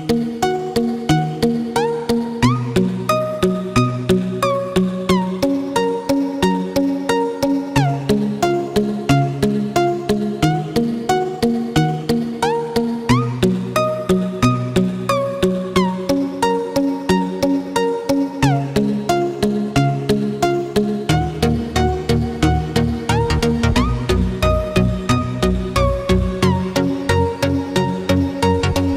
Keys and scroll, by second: 3.5 ctrl+-, 4.1 ctrl+=, 18.1 ctrl+-, 19.2 ctrl+=, 24.3 ctrl+z.